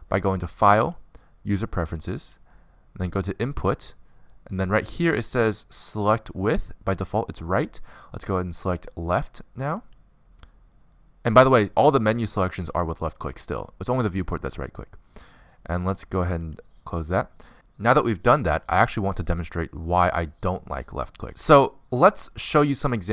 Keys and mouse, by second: 0.8-2.7 drag.